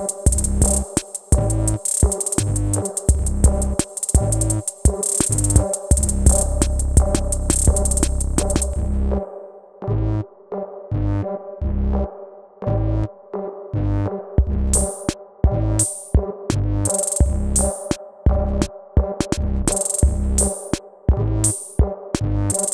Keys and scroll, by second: 7.5 BackSpace, 11.2 BackSpace, 17.5 BackSpace, 18.4 BackSpace.